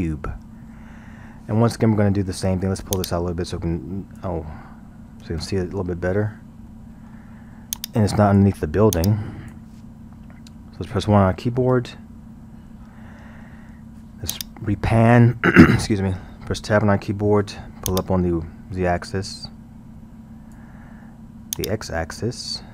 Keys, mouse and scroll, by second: 3.0-5.4 drag, 5.4 ctrl+z, 6.6 scroll, 6.7-7.8 middle drag, 7.8-10.9 drag, 10.9 KP_0, 11.7 KP_1, 12.2 scroll, 14.3-16.7 drag, 16.7 Tab, 17.9-20.9 drag, 21.6-22.7 drag.